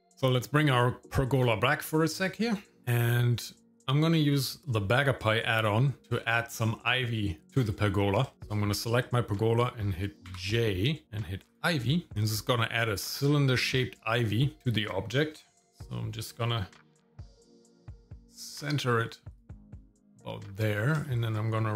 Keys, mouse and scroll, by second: 1.4 click, 2.8 shift+middle click, 2.8-3.7 scroll down 2, 3.7 click, 6.0 scroll up 1, 6.2 middle click, 7.4 click, 8.3 shift+middle click, 10.2 click, 10.3 j, 13.1 shift+middle click, 16.6 middle click, 17.1 g, 19.8 shift+middle click, 21.0 shift+middle click.